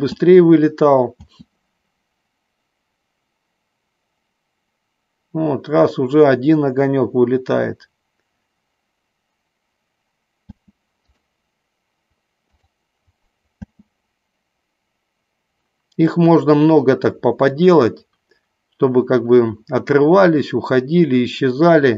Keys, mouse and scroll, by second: 0.4 space, 1.5 space, 10.8 space, 11.3 click, 12.8 click, 14.0 space.